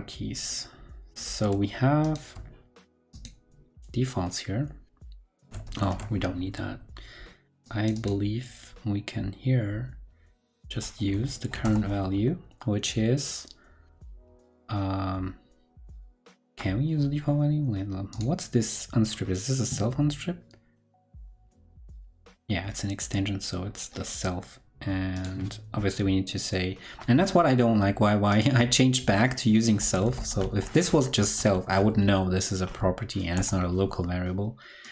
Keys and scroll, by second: 5.7 ctrl+super+Left.